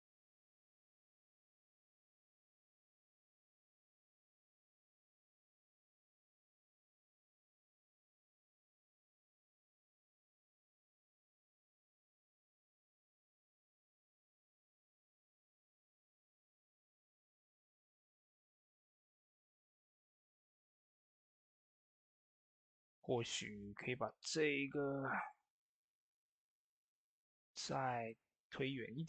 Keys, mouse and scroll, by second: 10.1 typing, 11.5 ctrl+s, 13.2-19.1 drag, 22.5 click, 22.5-23.3 typing, 22.5 click, 25.6-29.0 drag.